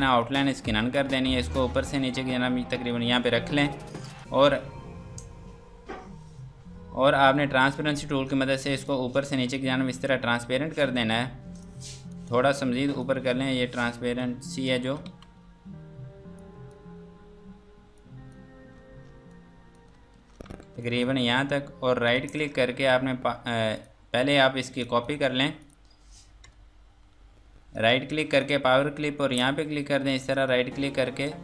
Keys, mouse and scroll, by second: 3.6 F2, 3.9 click, 7.9 click, 10.8 scroll down 1, 11.6 click, 16.4 click, 19.3 click, 20.2 ctrl+space, 20.7 F2, 20.8 click, 21.2 Escape, 22.1 click, 23.8 click, 24.1 Escape, 24.3 F3, 24.7 F2, 24.8 click, 25.2 Escape, 25.6 click, 26.4 KP_Add, 27.7 right click.